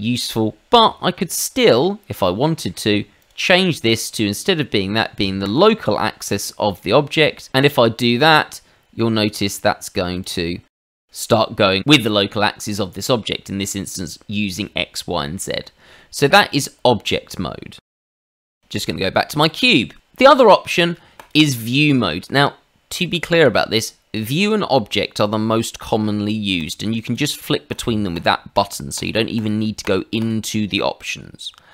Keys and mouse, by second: 1.6 middle click, 2.4 middle click, 3.2 click, 4.1 click, 5.4 click, 6.5 shift+middle click, 8.0 click, 10.2 click, 15.3 middle click, 16.2 click, 17.9 ctrl+z, 19.2 middle click, 19.6 shift+middle click, 21.2 click, 24.1 click, 26.6 click, 27.1 click, 27.7 click, 28.1 click, 28.9 click, 29.8 click, 30.2 click.